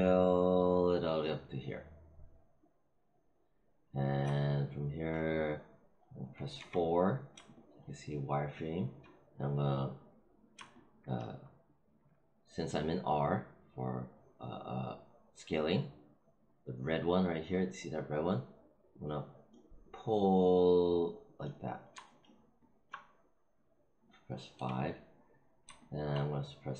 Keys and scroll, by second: 6.5 4, 24.5 5.